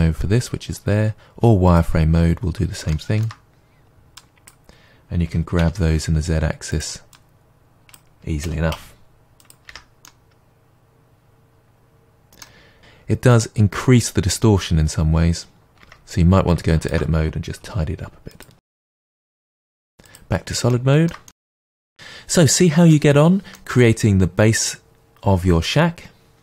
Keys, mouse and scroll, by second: 1.7 click, 2.9-4.2 shift+middle drag, 4.2 click, 5.3 g, 7.1 click, 8.4 g, 9.5 click, 9.7 Tab, 10.0-16.8 middle drag, 12.7-14.8 scroll up 2, 15.8 Tab, 16.8 alt+click, 16.9 middle click, 17.6 g, 18.4 click, 18.6 Tab, 18.6-20.1 middle drag, 19.0-20.1 scroll down 2, 20.1-20.7 drag, 20.7-26.4 shift+middle drag.